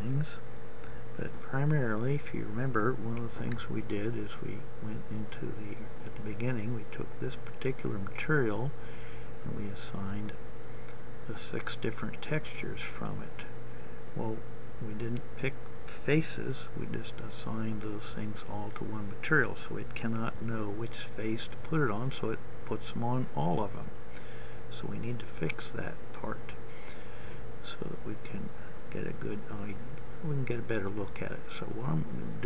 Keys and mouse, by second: 6.4-14.2 drag.